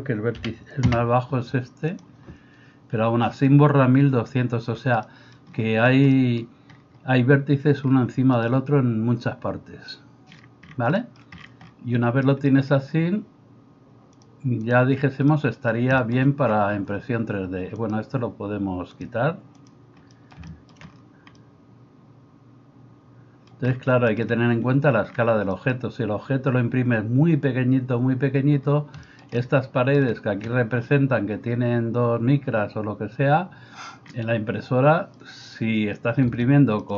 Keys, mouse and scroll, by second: 2.0-14.2 middle drag, 14.2-36.9 drag.